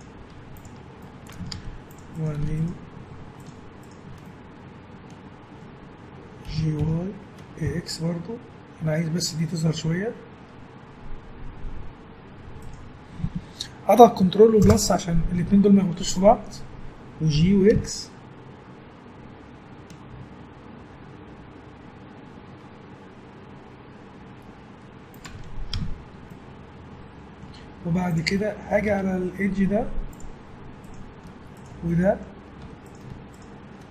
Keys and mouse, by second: 0.3 Tab, 1.5 ctrl+Tab, 6.5 g, 17.3 g, 25.7 Tab, 27.8 Tab, 28.9 ctrl+Tab, 30.8-32.2 drag, 32.4 click, 32.6 a.